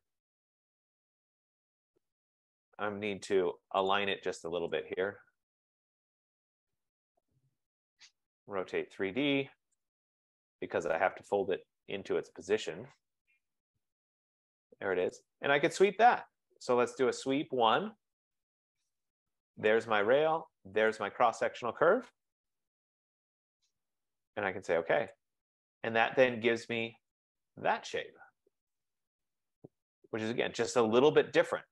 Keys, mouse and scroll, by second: 1.3-2.7 typing, 3.6 F15, 4.0 click, 5.0 click, 6.8 click, 7.1-8.7 typing, 10.0 click, 10.1 typing, 11.6 click, 12.7-13.4 typing, 12.7 click, 14.4 shift+click, 15.3 click, 16.4-18.1 typing, 19.7 click, 20.9 click, 22.4 Return, 23.2 Return, 25.3 click, 26.1-27.0 scroll, 28.5 right click, 28.7 scroll.